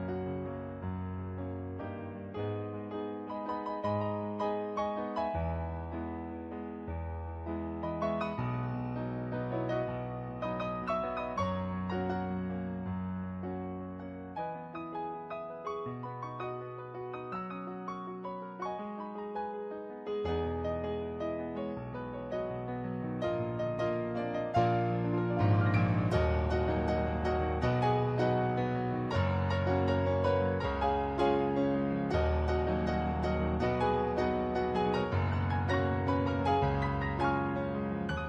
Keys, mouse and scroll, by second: 4.3 ctrl+z, 4.5 ctrl+z, 4.9 ctrl+z, 5.1 ctrl+z, 6.8 ctrl+z, 7.2 ctrl+z, 7.4 ctrl+z, 8.2 ctrl+z, 9.0 ctrl+z, 9.8 ctrl+z, 10.5 ctrl+z, 12.3 ctrl+z, 13.0 ctrl+z, 19.8 ctrl+z, 21.6 ctrl+z, 24.7 ctrl+z, 25.2 ctrl+z, 27.2 ctrl+z, 27.4 ctrl+z, 28.2 ctrl+z, 28.4 ctrl+z, 28.7 ctrl+z, 29.0 ctrl+z, 29.2 ctrl+z, 29.7 ctrl+z, 30.0 ctrl+z, 30.3 ctrl+z, 30.7 ctrl+z, 31.9 ctrl+z, 32.3 ctrl+z, 33.3 ctrl+z, 34.1 ctrl+z, 35.5 ctrl+z, 36.0 ctrl+z.